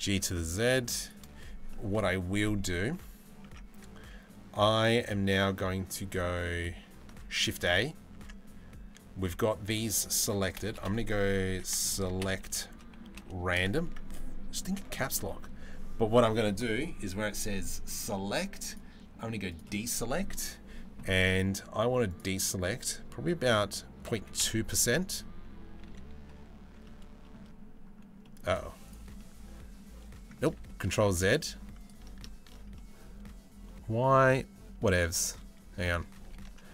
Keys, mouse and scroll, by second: 1.3 middle click, 3.2 Tab, 4.6 click, 7.1 ctrl+a, 7.8 Tab, 10.4 space, 18.4 right click, 21.7-24.0 right drag, 25.5 3, 26.5 middle click, 27.8 middle click, 28.2 z, 28.8-29.9 middle drag, 30.2 ctrl+z, 30.9 space, 32.4-35.4 middle drag, 35.8 ctrl+z, 36.4 middle click.